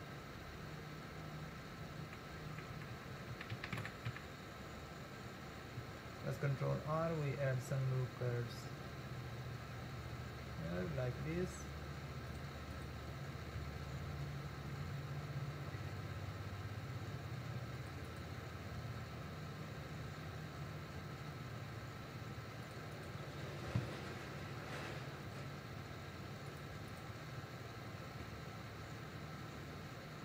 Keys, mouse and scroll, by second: 2.1 ctrl+z, 2.5 ctrl+z, 2.8 ctrl+z, 3.0 ctrl+z, 3.2 ctrl+z, 3.4 ctrl+z, 3.6 ctrl+z, 3.9 ctrl+z, 4.2 ctrl+z, 6.4 ctrl+r, 14.0 ctrl+r, 19.0 ctrl+r, 24.0 ctrl+r, 28.6 ctrl+r.